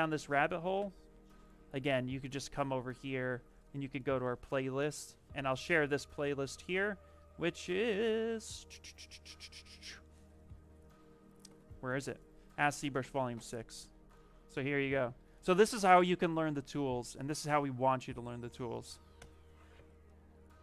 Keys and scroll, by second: 14.7 ctrl+c, 18.7 ctrl+v.